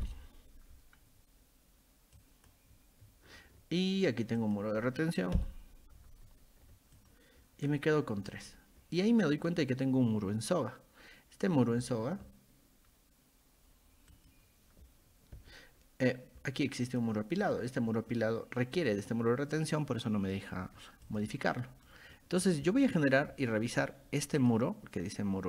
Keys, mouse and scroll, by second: 2.2 click, 4.4 click, 7.0 click, 8.3 click, 9.4 click, 14.1 click, 16.9 click, 17.4 click, 18.8 click, 21.1 click, 21.5-21.9 middle drag, 22.2 middle click, 24.4 click.